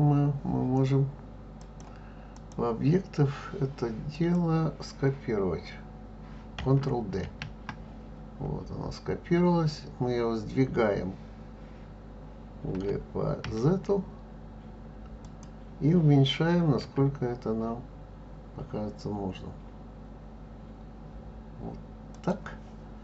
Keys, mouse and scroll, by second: 1.6-4.3 drag, 7.2 shift+d, 16.8 s.